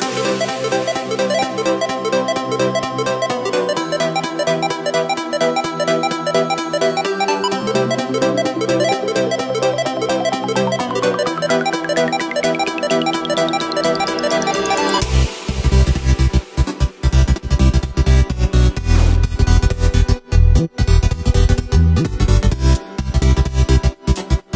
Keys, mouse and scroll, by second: 0.5 Tab, 2.5 Tab, 2.8 middle click, 3.6 right click, 4.4 middle click, 4.8 y, 7.6 g, 9.2 ctrl+z, 9.7 ctrl+z, 10.4 middle click, 11.3 right click, 11.6 middle click, 12.5 g, 14.5 Tab, 15.2 KP_1, 15.8-17.6 scroll up 2, 17.6 s, 21.9 KP_1, 22.3-23.0 scroll down 1, 23.4 shift+d, 24.2 g.